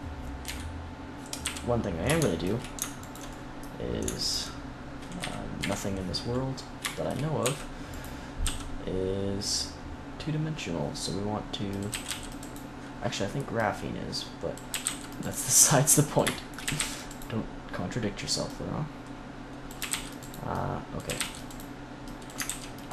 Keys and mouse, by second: 0.3 KP_1, 1.3 z, 1.8 middle click, 2.9 middle click, 5.1 KP_3, 5.5 KP_1, 7.3 e, 7.9-9.6 drag, 8.3 s, 11.8 a, 12.0 c, 12.3-16.0 drag, 14.6 a, 14.7 c, 16.2 click, 16.5 a, 16.7 c, 19.7 a, 19.8 c, 21.0 a, 21.1 c, 22.3 ctrl+r.